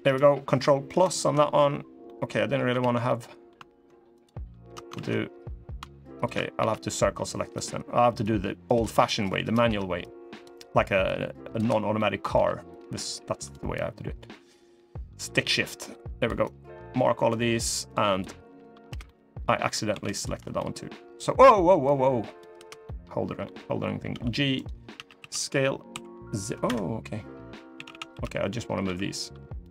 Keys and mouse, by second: 0.6 ctrl+KP_Add, 1.8 middle click, 2.5 ctrl+z, 2.8 middle click, 3.9 alt+shift+click, 4.8 ctrl+z, 5.9 shift+click, 6.3 c, 8.6 click, 8.9 middle click, 11.7 middle click, 11.7 c, 12.1 c, 18.8 middle click, 19.6 c, 22.6 middle click, 23.8 g, 24.7 a, 24.9 s, 27.5 a, 27.6 a, 27.8 b, 28.6 g.